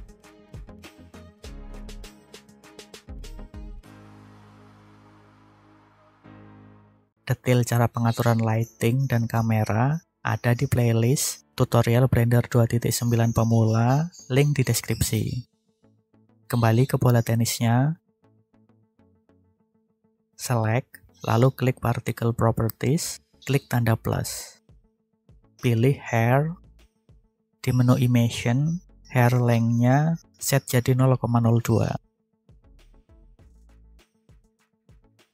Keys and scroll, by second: 0.1 3, 0.4 Return, 4.8 BackSpace, 5.1 2, 5.4 Return, 31.8 0, 32.2 2, 32.5 Return.